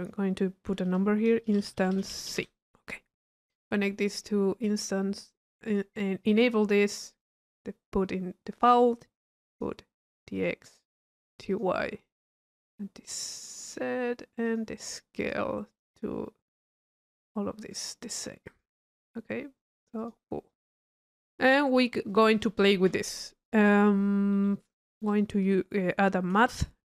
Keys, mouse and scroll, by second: 3.3 click, 4.1 click, 5.7 click, 7.2-8.6 drag, 9.5 click, 10.4 click, 12.4 click, 13.2 click, 14.5 click, 15.2 click, 16.7 click, 17.7 click, 18.5 click, 20.0 click, 20.6 middle click, 21.1 click, 23.0 middle click, 23.0-23.4 scroll up 1, 23.6 click, 24.3 right click, 24.9 click, 26.5 Delete.